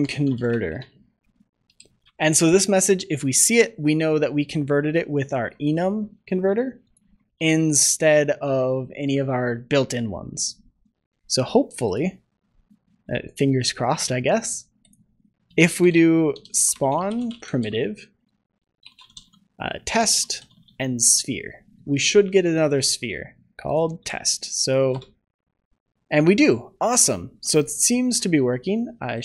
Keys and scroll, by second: 2.0 ctrl+s, 7.2 ctrl+s.